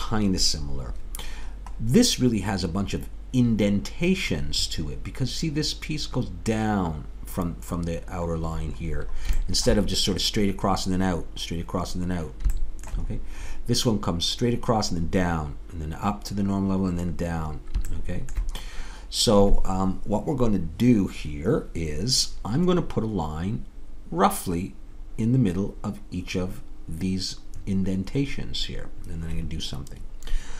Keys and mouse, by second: 18.8-21.5 middle drag, 22.8-26.8 middle drag.